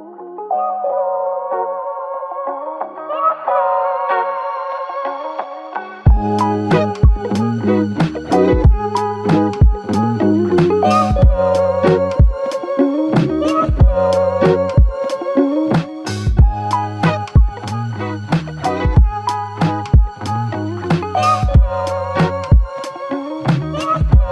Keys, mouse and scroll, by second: 5.6 typing, 9.8 typing, 21.9 f.